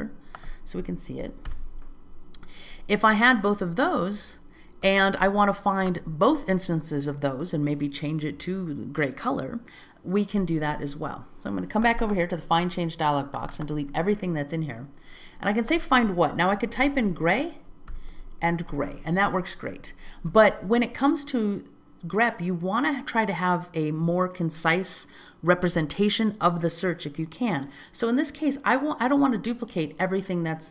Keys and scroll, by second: 1.7 Return.